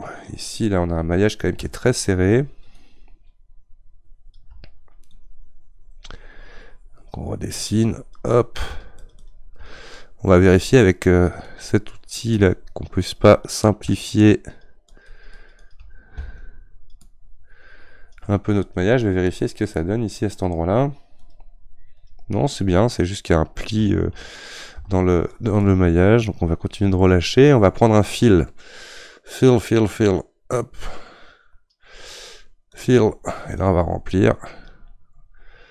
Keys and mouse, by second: 2.0-35.7 shift+drag.